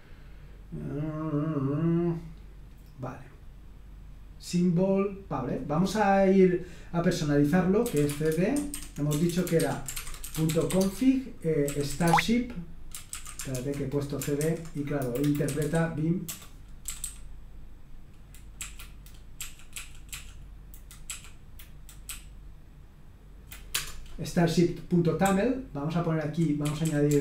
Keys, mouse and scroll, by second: 0.6-1.8 scroll down 2, 5.4 click, 7.5-12.1 typing, 13.1 ctrl+a, 13.5-17.5 typing, 14.4 alt+b, 15.0 Delete, 15.2 Delete, 18.5 Right, 19.3 Right, 19.7 Right, 20.1 Right, 21.0 Right, 22.0-23.4 Right, 23.7 Return, 25.2-27.2 typing.